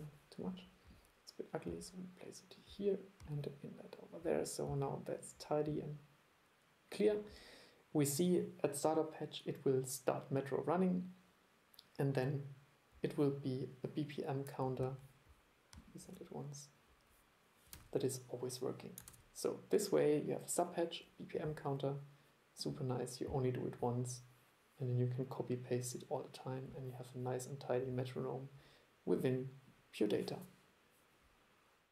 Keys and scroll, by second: 17.8 super+e, 19.2 super+e.